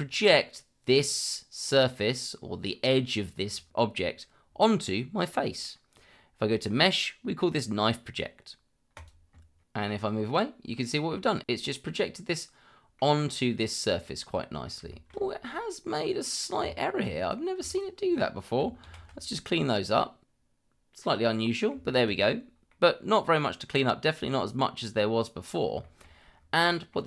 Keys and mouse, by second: 6.5-9.1 drag, 9.6-10.9 middle drag, 11.0 click, 11.5-13.2 middle drag, 14.9 shift+middle drag, 15.8-16.4 middle drag, 16.6 Tab, 17.2 click, 17.7 shift+click, 18.8 ctrl+x, 20.0-21.9 middle drag, 22.0 shift+middle drag, 22.7-23.1 middle drag, 25.8 shift+middle drag, 26.6 middle drag.